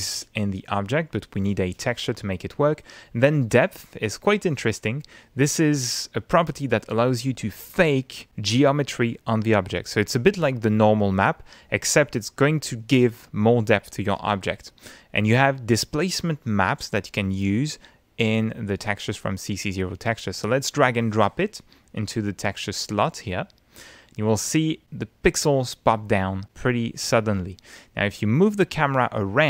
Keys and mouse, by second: 1.7 click, 3.8 click, 6.1 click, 15.8-16.8 drag, 17.2 click, 21.4-24.4 drag, 29.1-29.4 middle drag.